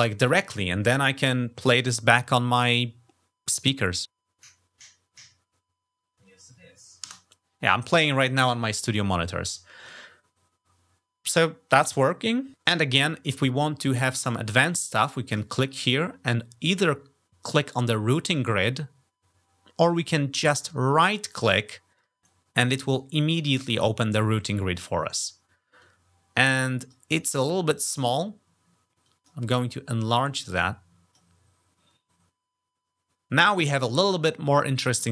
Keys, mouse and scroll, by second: 19.7 click, 22.0 click, 25.6-26.7 drag, 28.8 click, 30.1 click.